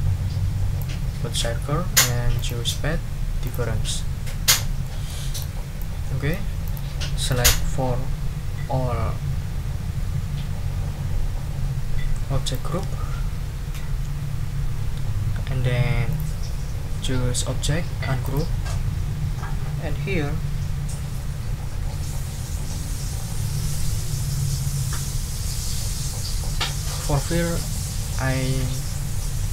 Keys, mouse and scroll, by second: 2.3 click, 3.4 click, 3.9 click, 4.8 ctrl+click, 5.3 ctrl+click, 5.8 ctrl+click, 6.6 click, 7.3-12.7 drag, 16.1 click, 18.2 click.